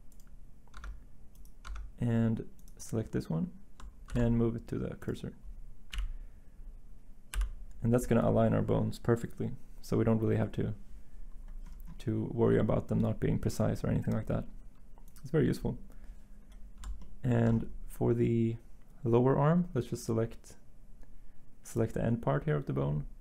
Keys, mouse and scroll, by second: 0.8 Tab, 1.7 Tab, 4.1 s, 5.9 1, 7.3 7.